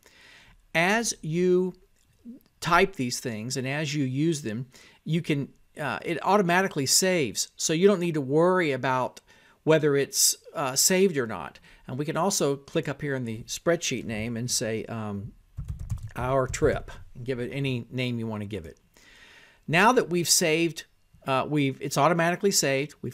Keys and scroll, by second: 0.0-0.1 typing, 1.8-11.0 typing, 11.8 Tab, 12.6-20.0 typing, 20.9 Tab, 22.5-23.1 typing.